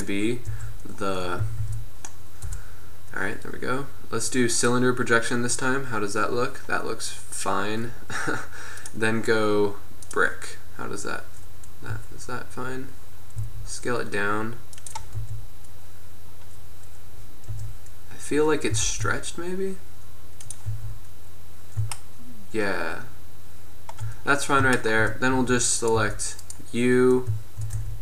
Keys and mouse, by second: 0.6 Tab, 1.5 a, 1.7 a, 2.5 u, 10.6 middle click, 10.9 middle click, 13.6 s, 15.4 Tab, 17.7 Tab, 18.8 s, 20.9 Tab, 25.0 middle drag, 25.5 Tab, 26.1 Tab, 27.9 Tab.